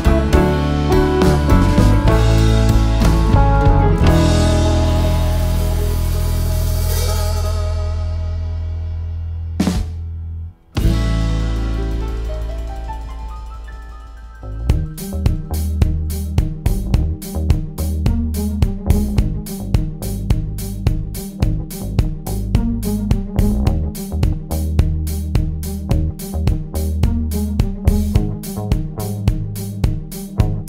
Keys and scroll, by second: 0.1 shift+F6, 2.4 F1, 2.8 ctrl+d, 3.4 ctrl+*, 4.1 Home, 5.1 shift+F6, 7.4 F1, 7.8 ctrl+d, 8.5 ctrl+*, 9.2 F7, 10.7 F1, 11.1-11.7 typing, 12.4 shift+F6, 16.3 F1, 16.7 ctrl+d, 17.2 ctrl+*, 19.2 F7, 19.7 F1, 20.1 F7, 20.6 F1, 21.3 shift+F6, 24.0 F1, 24.7 ctrl+d, 25.8 ctrl+*, 26.4 shift+F6, 29.2 BackSpace, 30.1 F2, 30.4 F1.